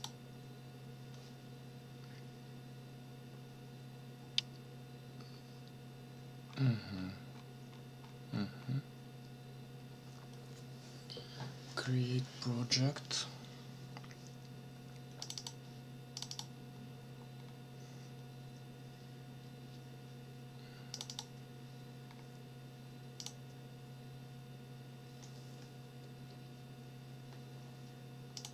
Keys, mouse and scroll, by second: 6.5-8.2 scroll up 10, 8.6 scroll up 1, 15.2 click, 16.2 click, 17.3 scroll down 1, 20.9 click, 22.0 scroll down 2, 23.2 click, 28.4 click.